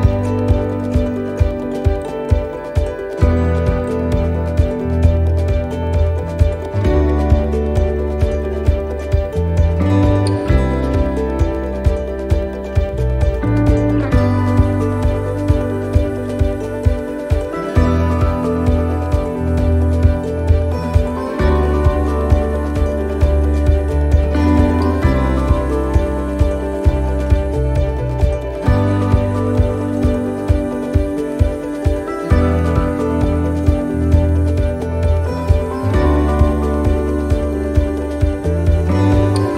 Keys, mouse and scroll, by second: 0.2 alt+shift+right click, 3.2 ctrl+z, 3.6 alt+shift+right click, 5.7 shift+middle click, 7.1 alt+shift+right click, 7.5 alt+shift+right click, 8.5 middle click, 9.2-9.9 scroll down 4, 9.6 middle click, 10.9 alt+shift+right click, 16.8 shift+middle click, 17.5 scroll down 1, 18.1 shift+middle click, 19.7 alt+shift+right click, 21.8 shift+middle click, 22.3 middle click, 23.0 shift+middle click, 23.6 middle click, 25.6 c, 30.8 shift+middle click, 31.6 c, 33.4 middle click, 34.0 c, 36.3 shift+right click, 36.8 middle click, 37.8 scroll up 2, 38.3 shift+middle click, 39.2 c.